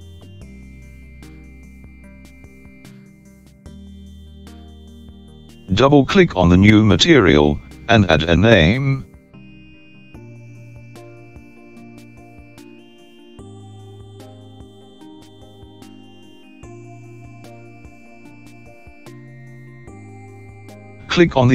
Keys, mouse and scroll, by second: 8.4 click, 8.7-12.5 drag.